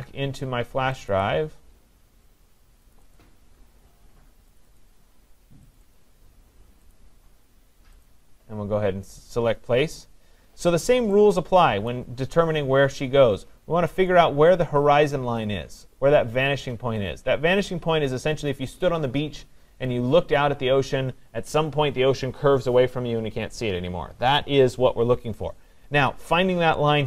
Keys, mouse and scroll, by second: 1.0 click, 1.2 click, 2.9 click, 3.2 click, 4.6 click, 4.8 click, 5.8 click, 6.0 click, 6.9 click, 8.1 click, 11.9 click.